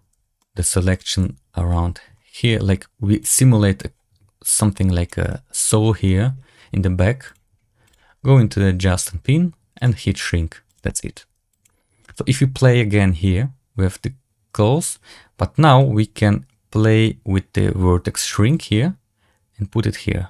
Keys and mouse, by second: 0.0 c, 1.1 c, 7.2 click, 7.8 click, 9.7 click, 10.6 click, 11.4 drag, 18.8-20.2 drag.